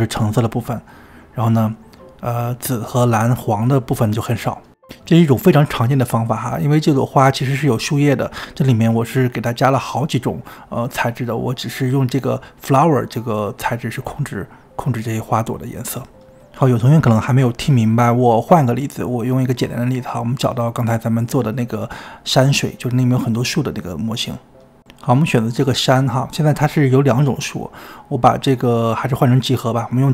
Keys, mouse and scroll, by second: 19.8-20.8 drag, 22.2 x, 24.1 click, 24.8 click, 24.9-25.4 scroll down 19, 25.4 shift+middle click, 25.6 click, 25.8-29.1 middle drag, 29.1 click, 29.8-30.1 drag.